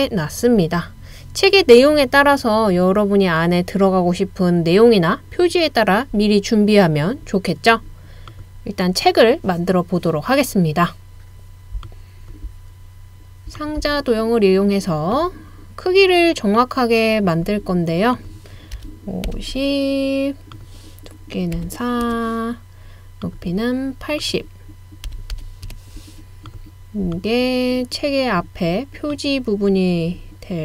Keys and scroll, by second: 18.8-19.3 typing, 21.6 typing, 22.1 Return, 24.9-25.6 typing, 25.7 Return, 28.2-28.9 typing.